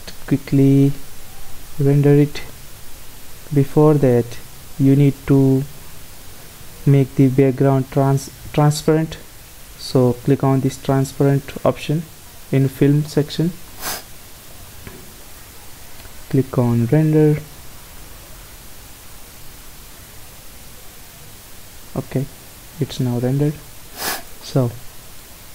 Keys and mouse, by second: 1.7-4.7 drag, 10.6-12.6 drag, 13.0-18.1 drag, 23.0 Escape, 24.2-25.5 middle drag.